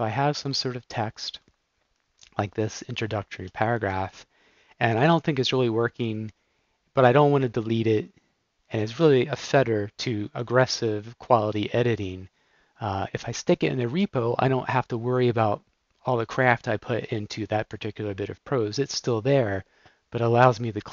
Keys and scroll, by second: 3.4 alt+p.